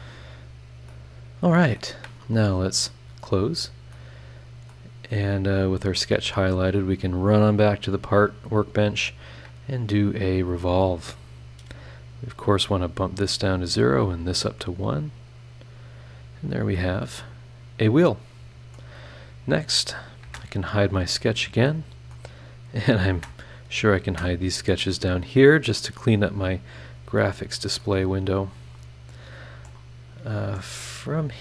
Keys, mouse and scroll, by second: 0.1-0.6 scroll down 4, 0.9-1.9 drag, 1.0 right click, 2.9 click, 3.6 scroll down 2, 3.9 click, 4.0 right click, 4.9 scroll down 2, 5.4 scroll down 2, 7.0 click, 8.4 click, 10.2 click, 13.1 click, 14.1 click, 15.3 click, 16.1 scroll down 1, 16.4 scroll up 1, 16.7-18.9 middle drag, 16.9-18.9 right drag, 19.8 click, 20.2 space, 21.1 scroll up 2, 21.6 click, 21.7 right click, 22.1 click, 22.9 click, 23.1 space, 23.9 click, 24.1 space, 24.5 scroll down 1, 24.8-25.9 middle drag, 24.8-25.9 drag, 26.1-26.6 scroll down 1, 26.8-27.2 scroll up 1, 27.2 middle click, 27.2 click, 27.8 right click, 27.9 scroll down 1, 28.5 scroll up 2, 29.1-29.7 scroll down 6, 29.6 middle click, 29.7-30.7 right drag, 30.8-31.4 middle drag, 30.8-31.4 drag.